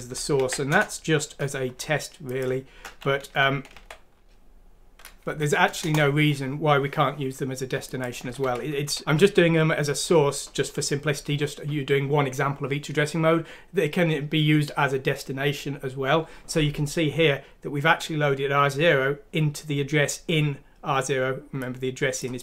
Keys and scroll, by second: 0.1 Down, 0.7 ctrl+v, 0.7 Return, 3.7 typing, 5.3 F6, 5.8 Return, 8.4-8.9 typing.